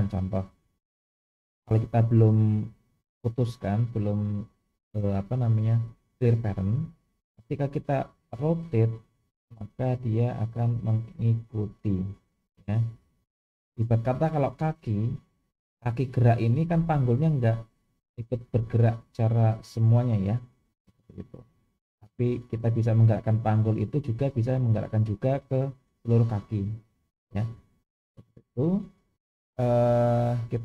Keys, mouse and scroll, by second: 3.4 click, 8.0 r, 30.0-30.6 drag.